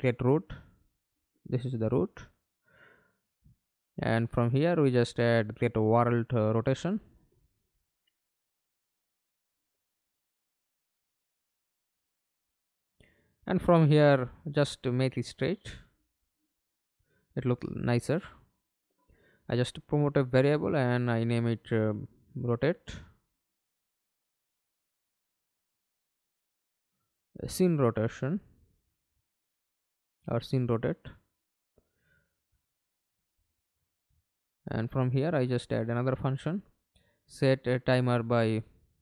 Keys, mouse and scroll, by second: 0.0-1.7 typing, 2.3 Return, 5.1 right click, 9.1-13.1 typing, 13.2 Return, 14.5 right click, 15.5 right click, 17.7 right click, 23.1-25.0 typing, 25.3 Left, 25.5 Left, 25.7 Left, 25.8 Left, 26.0 Left, 26.2 Left, 26.3 Left, 26.5 Left, 27.4-29.1 typing, 29.3 Return, 34.0 right click, 34.7 right click, 36.4-38.8 typing.